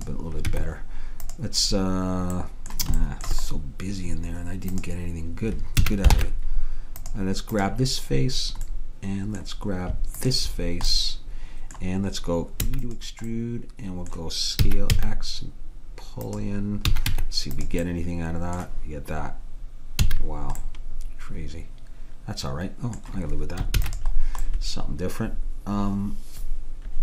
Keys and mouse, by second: 0.0 click, 0.6 Tab, 4.8-6.2 drag, 5.9 a, 6.2 ctrl+Tab, 7.6 click, 8.8 click, 10.2-12.0 drag, 12.7 e, 13.4-14.7 drag, 14.7 s, 17.0 a, 17.1 Tab, 20.1 a, 23.9 ctrl+s.